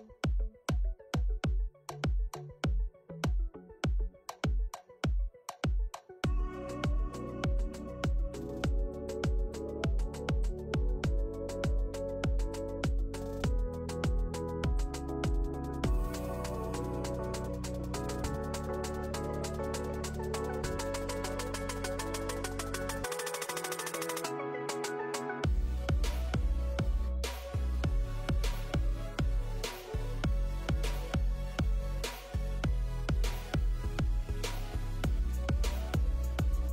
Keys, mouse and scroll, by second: 0.0 scroll up 5, 0.4 shift+middle click, 0.6 scroll up 1, 1.6 ctrl+s, 1.6 click, 4.2 click, 4.9 click, 5.6 click, 6.1 click, 6.8 shift+middle click, 7.4 click, 7.4-9.2 scroll up 9, 9.6 middle click, 10.1 scroll up 2, 10.2 middle click, 11.3 click, 17.0 click, 17.4 click, 17.8 middle click, 18.4 middle click, 18.4-19.1 scroll down 4, 19.3 click, 19.6 click, 21.0 middle click, 21.4 middle click, 21.4 click, 21.8 scroll up 3, 22.0 click, 25.7 click, 27.3 middle click, 29.6 click.